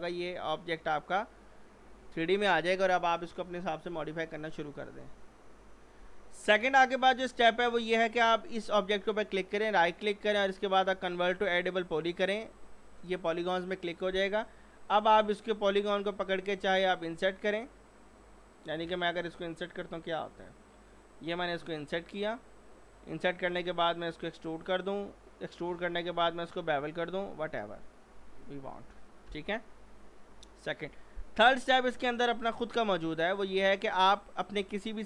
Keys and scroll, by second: 29.3 F4.